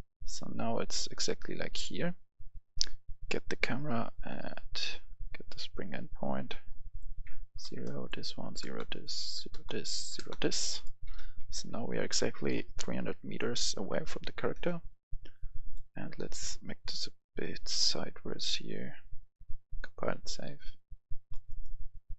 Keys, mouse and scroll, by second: 2.8 click, 7.1 KP_0, 7.7 Return, 8.0 click, 8.3 KP_0, 8.7 Return, 8.9 click, 9.2 KP_0, 9.5 Return, 9.9 click, 10.0 KP_0, 10.2 Return, 10.8 right click, 11.2 a, 11.6 a, 11.9 a, 12.1 a, 13.0 right click, 13.2 d, 14.7 space, 15.2-20.3 drag, 21.3 right click.